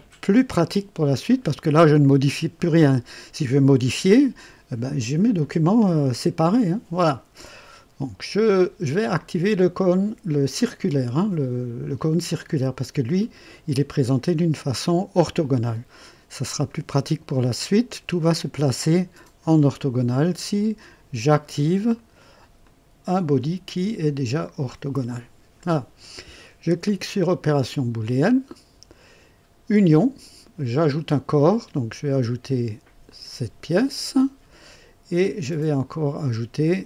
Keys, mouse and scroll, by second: 13.1 click, 21.9 right click, 22.6 click, 24.1 click, 28.0 click, 30.8 click, 33.0 click, 35.5 click.